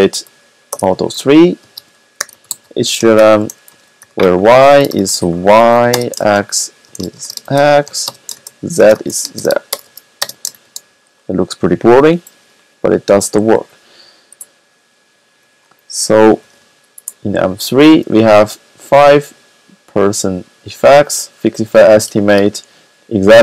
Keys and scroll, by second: 0.0-10.8 typing, 11.8 typing, 16.3 typing, 19.1 typing.